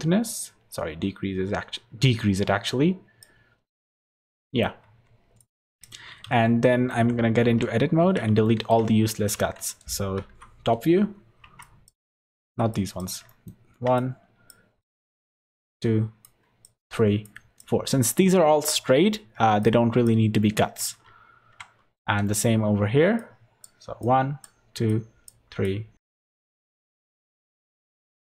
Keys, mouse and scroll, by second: 3.7 middle click, 4.8 Tab, 5.4 click, 5.7 click, 6.2 z, 6.7 middle click, 6.9 Tab, 7.2-7.8 scroll down 3, 7.4 2, 7.8 scroll up 3, 8.0 alt+a, 8.4 shift+middle click, 9.4 z, 10.3 KP_7, 11.6 click, 12.4 alt+a, 12.7 click, 13.3 shift+middle click, 13.9 click, 15.3 shift+click, 20.4 shift+middle click, 21.8 scroll up 4, 22.2 shift+middle click, 23.2 shift+click, 24.9-26.8 shift+click, 26.8 ctrl+z, 26.9 ctrl+z, 27.0 shift+click, 27.2 ctrl+z, 27.2 shift+click, 27.4 shift+click, 27.7 shift+click.